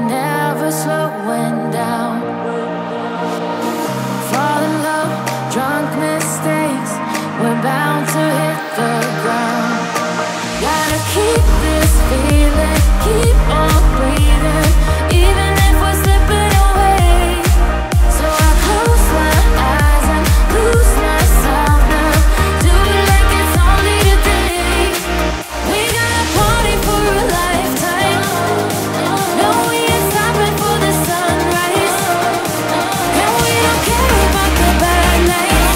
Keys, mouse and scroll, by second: 0.0 ctrl+z, 0.3 right click, 0.4 ctrl+z, 0.6 ctrl+z, 1.2 right click, 1.3 ctrl+z, 2.2 ctrl+z, 3.9 e, 4.4 e, 8.2 e, 9.1 e, 10.1 ctrl++, 11.3 e, 14.2 right click, 15.9 right click, 25.9 ctrl+z, 27.8 right click, 28.0 ctrl+z, 28.3 right click, 28.8 right click, 29.0 right click, 30.7 ctrl+z, 31.2 right click, 33.8 right click.